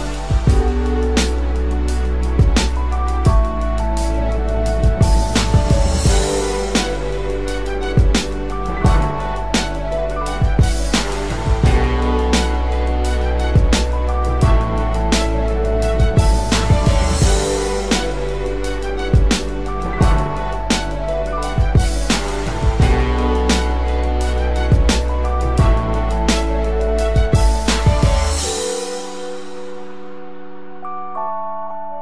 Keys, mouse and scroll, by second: 28.0 alt+click, 30.8 ctrl+t, 31.7 alt+shift+click.